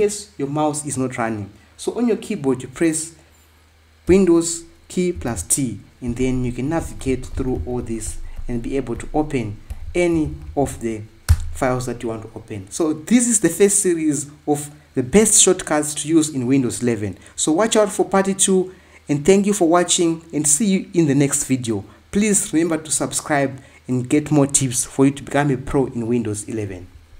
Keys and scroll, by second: 6.0 super+t, 6.5 Right, 10.0 Down, 10.5 Left, 11.6 Return.